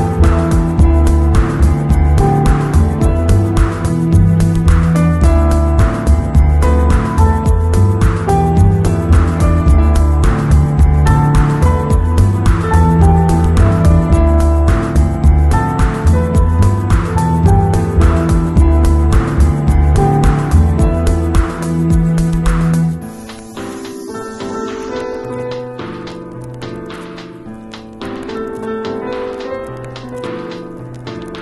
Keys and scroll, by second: 14.5 super+v, 15.0 super+v, 15.4 super+0, 27.8 alt+shift+Return.